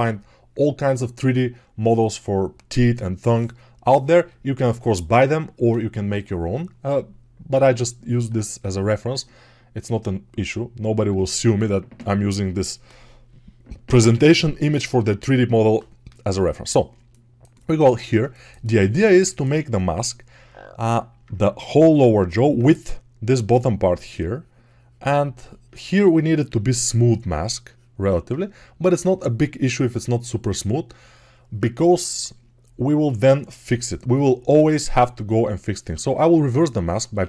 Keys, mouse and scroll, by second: 16.9-37.2 alt+drag, 17.9 ctrl+z, 35.8 a.